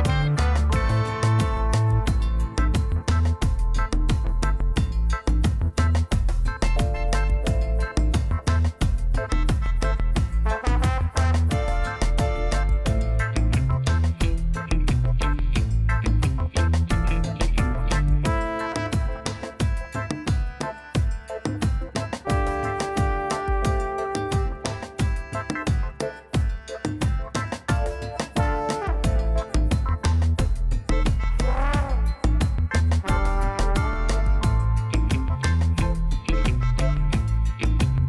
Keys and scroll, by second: 5.6 Tab, 7.3 ctrl+r, 9.6 ctrl+z, 11.1 ctrl+r, 11.9 g, 12.0 z, 13.9 Tab, 28.6 ctrl+j, 31.1 ctrl+j, 34.6 alt+a.